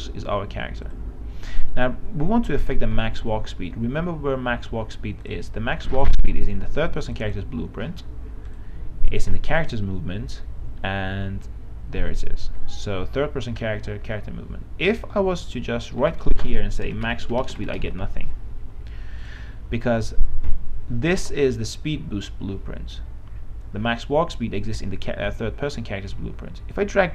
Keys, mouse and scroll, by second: 3.0 right click, 5.4 click, 16.4 right click, 17.1-18.7 typing, 19.4-27.1 drag.